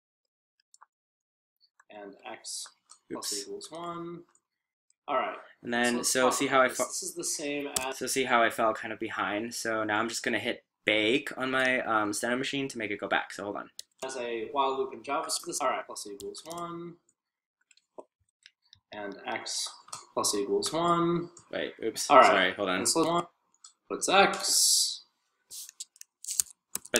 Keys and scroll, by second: 0.5-5.7 typing.